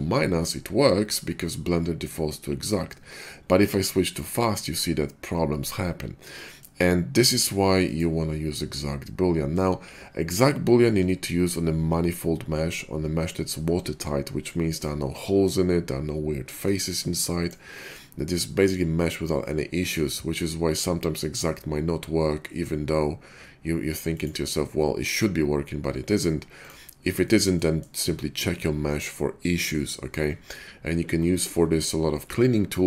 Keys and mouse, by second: 4.1-7.8 middle drag, 8.0-10.5 middle drag, 10.5-17.2 drag, 17.2-24.0 shift+middle drag, 24.2-30.7 middle drag, 30.7-32.7 drag, 32.7 middle click.